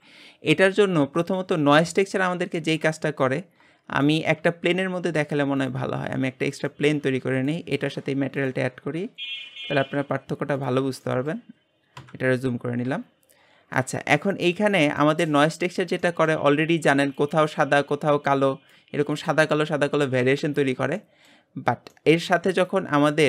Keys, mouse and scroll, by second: 0.0 click, 2.0-3.7 drag, 3.7-4.1 scroll down 4, 4.1 shift+middle click, 4.4 shift+a, 5.9-6.5 scroll down 7, 6.7 shift+middle drag, 7.0 g, 10.7-11.2 drag, 11.2 middle click, 12.0 KP_Decimal, 13.7 middle click, 14.1-15.0 scroll up 3, 16.1-22.7 middle drag, 22.7-23.2 drag.